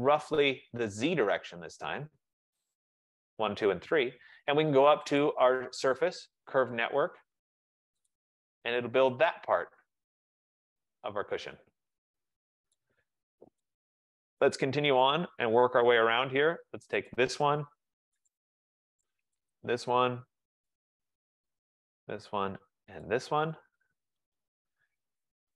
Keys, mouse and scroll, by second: 0.6 click, 2.7 shift+click, 5.3 click, 6.7 click, 8.2 click, 9.4 click, 10.7 middle click, 12.9 right click, 13.4 middle click, 14.7 right click, 15.1 click, 16.2 middle click, 17.2 click, 18.4 click, 19.7 shift+click, 20.8 click, 22.0 click, 23.0 shift+click, 23.3 shift+click, 24.2-25.2 typing.